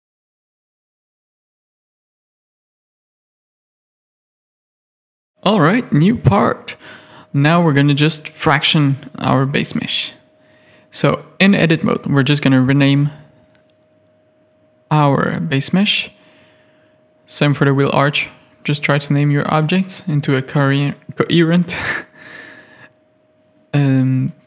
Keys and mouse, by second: 0.1 shift+middle click, 1.2 click, 1.6 shift+middle click, 2.2 KP_3, 3.1 ctrl+s, 6.6 click, 7.3 click, 7.9 middle click, 8.5 Tab, 9.3 1, 10.3 Tab, 11.0 click, 11.2-15.3 drag, 16.7-22.1 drag, 18.4 n, 20.0 e, 22.7 alt+a, 23.1 middle click, 23.8 middle click.